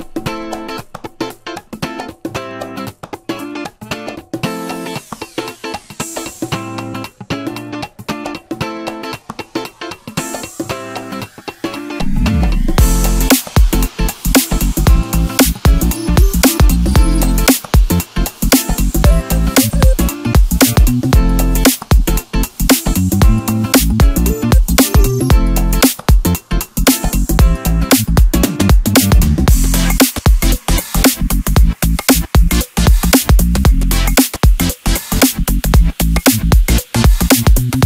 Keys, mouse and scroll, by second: 1.7-3.1 middle drag, 3.1-5.6 drag, 6.3 click, 6.8-8.0 middle drag, 8.0-9.0 scroll up 2, 9.0 s, 10.8 click, 12.5-13.8 middle drag, 13.8 i, 15.6 g, 17.5 i, 19.3 g, 21.4 i, 23.1 g, 24.9-27.9 middle drag, 28.4 ctrl+r, 31.1 drag, 32.2-34.8 drag, 35.6-37.7 middle drag, 37.7 click.